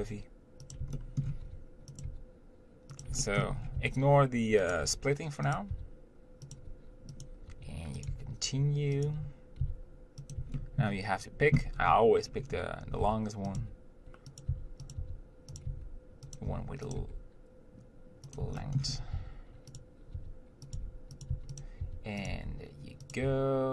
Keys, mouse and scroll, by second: 1.2 shift+middle click, 1.7 e, 2.3 g, 3.5 shift+middle click, 3.8 scroll up 1, 4.1 s, 5.0 g, 6.8 g, 8.3 g, 9.9 s, 10.8-12.0 shift+middle drag, 12.0-12.6 scroll down 1, 12.6-13.3 scroll up 1, 13.3 e, 13.8 g, 14.7 s, 15.9 g, 16.7 e, 17.2 g, 18.8 shift+middle click, 19.1-19.4 scroll up 1, 19.4-22.5 typing.